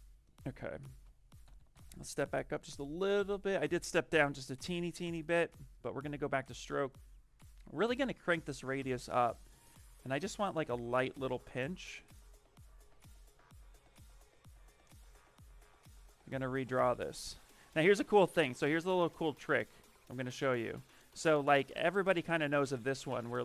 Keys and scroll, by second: 0.5 space, 1.3 d, 1.9 d, 2.6 space, 20.2 1, 21.7 ctrl+z.